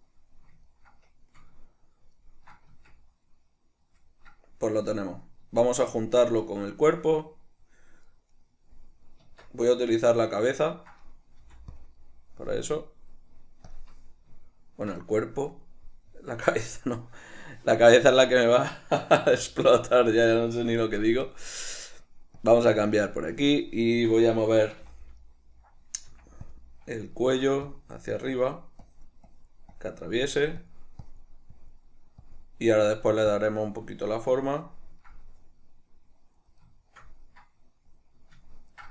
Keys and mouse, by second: 2.9 Tab, 8.4 right click, 9.4 Tab, 10.2-11.9 middle drag, 11.5 f, 11.9 click, 12.1 middle click, 12.8-13.9 drag, 17.2-21.4 middle drag, 20.1 ctrl+d, 21.4-25.4 drag, 25.0 g, 25.4-26.7 middle drag, 26.3 f, 26.7 click, 26.9 middle click, 27.8-30.4 drag, 30.4 middle click, 30.7-33.1 drag, 33.1 middle click, 33.5 click, 34.1-38.9 middle drag.